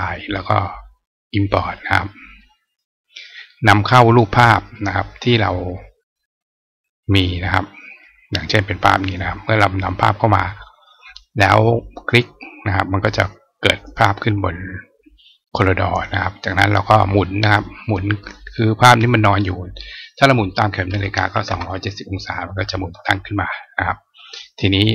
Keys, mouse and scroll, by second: 2.2 click, 7.0 click, 8.7 click, 8.9 click, 11.9 click, 13.1 click, 18.2 click.